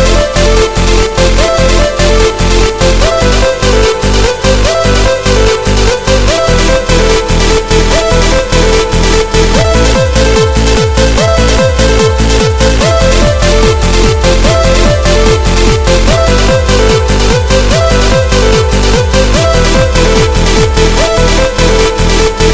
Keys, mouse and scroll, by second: 3.7 KP_1, 4.8-5.7 scroll up 3, 6.4 shift+middle click, 11.4 click, 13.6-14.2 scroll up 2, 18.6 right click, 20.1 middle click.